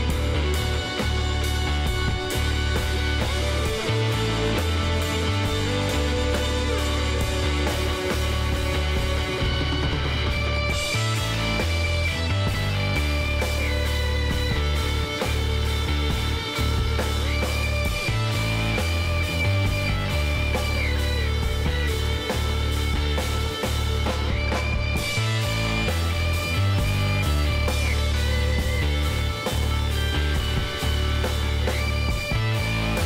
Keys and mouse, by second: 0.0-2.1 middle drag, 2.7-5.3 middle drag, 5.3-7.1 drag, 6.4 k, 11.5-14.2 middle drag, 12.1 a, 13.5 k, 19.3-23.4 middle drag, 19.7 a, 22.8 k, 27.7-33.0 middle drag, 30.1 k.